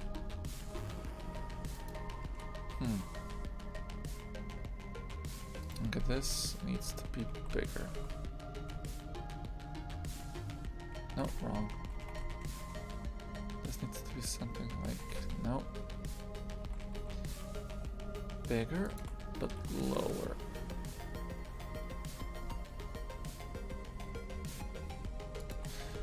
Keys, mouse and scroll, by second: 5.7 right click, 6.6 s.